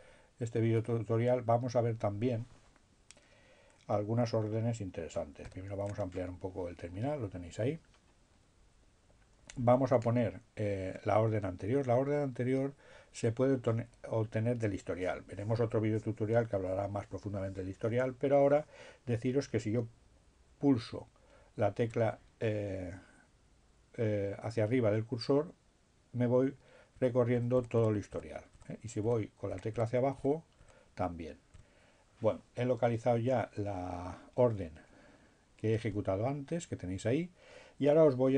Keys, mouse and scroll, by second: 0.2-1.5 drag, 18.8 Up, 27.1 Down, 31.6 Up.